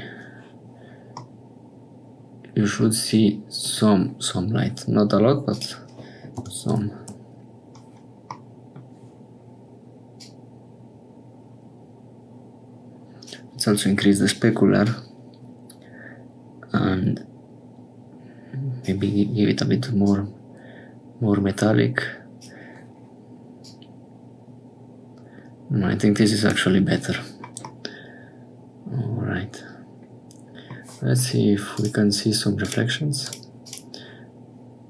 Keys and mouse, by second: 1.3-3.8 middle drag, 5.5-7.8 drag, 8.4 middle click, 10.2-13.3 drag, 14.9-18.8 drag, 20.0-22.5 drag, 23.6-26.5 drag, 27.7-31.7 middle drag, 31.7-34.8 drag.